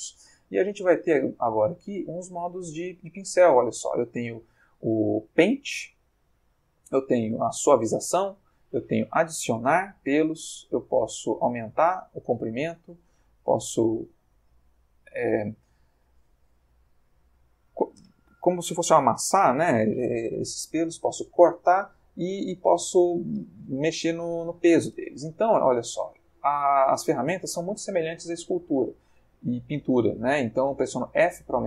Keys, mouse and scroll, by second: 28.0 f.